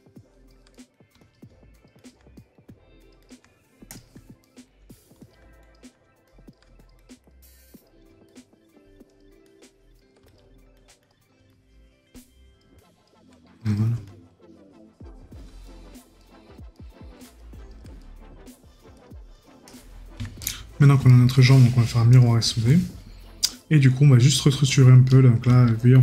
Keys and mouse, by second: 0.7 right click, 2.3 right click, 4.4 right click, 15.6 right click, 18.0 right click, 20.4 right click, 25.1 right click.